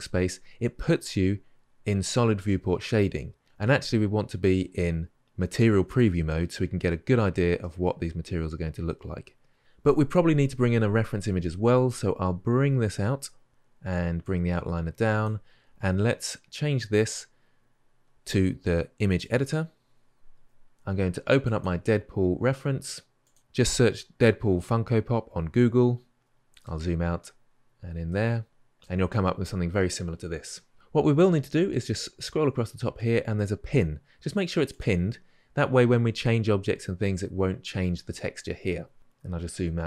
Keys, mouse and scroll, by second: 6.1-7.4 drag, 7.4-11.1 middle drag, 12.8-39.8 drag.